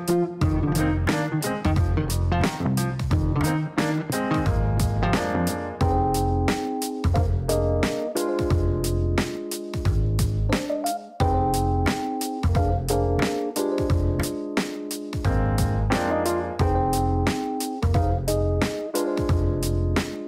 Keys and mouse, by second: 1.1 shift+t, 2.1 1, 4.4 click, 4.5 click, 4.7 click, 9.3 KP_1, 9.4 KP_0, 10.0 KP_Enter, 13.7 click, 13.8 click, 14.6 click, 15.5-16.5 typing, 17.9-19.2 typing.